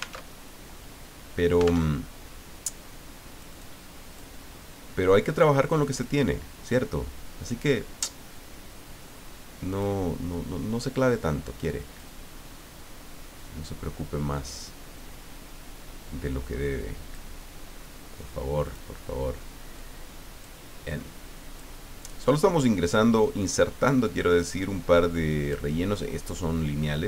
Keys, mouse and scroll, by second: 0.3 alt+Tab, 2.0 alt+Tab, 3.3 click, 4.1 click, 5.7 click, 7.4 click, 9.7 click, 11.7 click, 13.3-17.4 drag, 18.6 click, 19.7 click, 20.9 click, 23.2-25.7 drag, 26.9-27.0 drag.